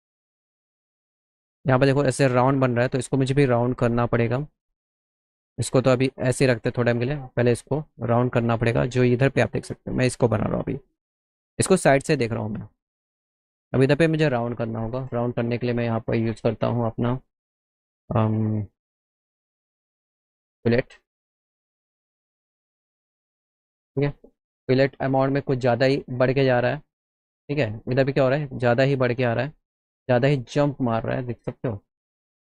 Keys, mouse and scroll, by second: 2.7 click, 6.3 click, 7.1 click, 9.3 middle click, 9.8 middle click, 15.2 click, 21.9 click, 23.0 click, 25.0 click, 26.0 ctrl+z, 27.8 click, 29.1 ctrl+z, 32.2-32.5 drag.